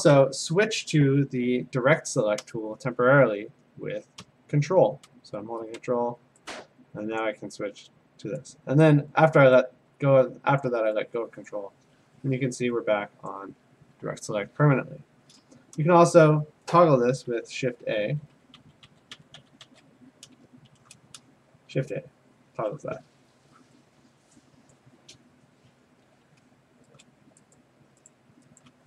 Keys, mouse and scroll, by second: 7.2 ctrl+click, 8.4 click, 9.3 click, 10.6 click, 11.5 click, 13.3 click, 17.3-19.6 typing, 17.7-20.0 drag, 20.7 a, 24.7 click, 27.0 click, 28.1 click, 28.6 shift+click.